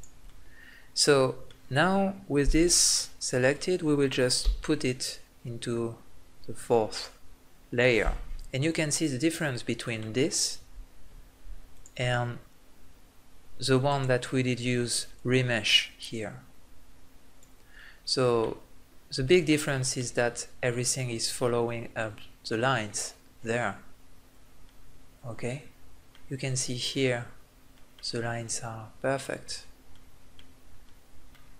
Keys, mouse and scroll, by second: 0.4-3.1 middle drag, 4.4 m, 9.2 middle click, 9.8-11.1 drag, 12.3-13.8 drag, 13.8-15.1 right drag, 16.8 click, 17.8 middle click, 20.0-25.2 middle drag, 30.9-31.5 middle drag.